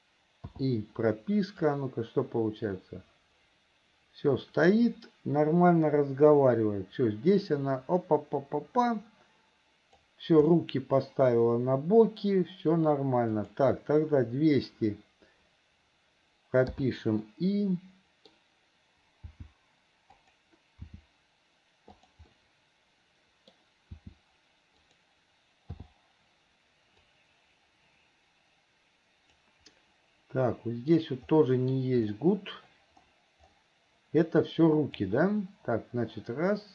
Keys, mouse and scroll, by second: 1.9-10.3 drag, 10.7-12.4 middle drag, 13.6 click, 17.4-18.5 middle drag, 22.5-23.7 middle drag, 27.3-29.8 drag, 30.0-31.1 middle drag, 31.5 middle click, 35.3-36.7 drag.